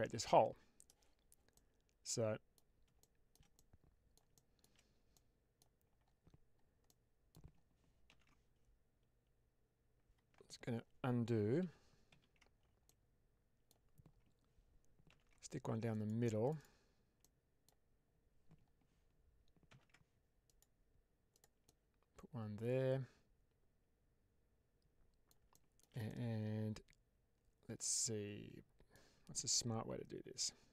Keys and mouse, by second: 1.4-2.5 middle drag, 3.4 middle click, 4.2 shift+middle click, 5.0 middle click, 6.7 middle click, 8.0 ctrl+r, 11.5 ctrl+z, 12.2 ctrl+z, 12.8 middle click, 15.0 ctrl+r, 16.3 click, 17.1 middle click, 19.6 ctrl+r, 21.2 click, 21.5-25.2 middle drag, 25.4 shift+middle click, 25.9-28.8 middle drag.